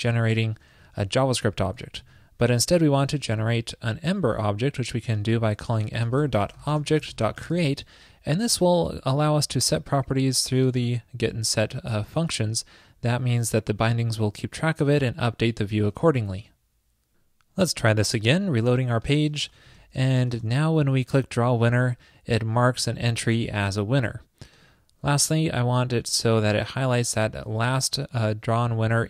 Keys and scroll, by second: 2.1 super+z, 8.6 alt+shift+Left, 8.8 alt+shift+Left.